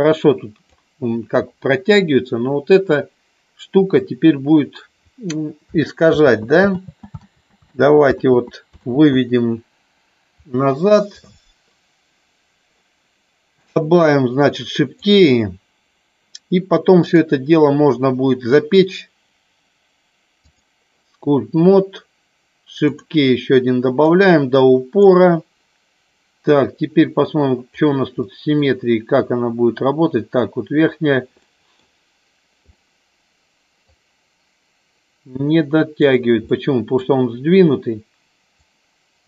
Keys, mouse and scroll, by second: 6.1 ctrl+z, 6.6 ctrl+z, 7.6 ctrl+z, 9.1 ctrl+z, 13.5 click, 14.9 click, 17.1-20.8 drag, 22.9 click, 24.1 click, 27.8 click, 28.1 middle click, 31.4 middle click, 32.6-33.8 middle drag, 36.0 click, 36.4 middle click, 38.5 click.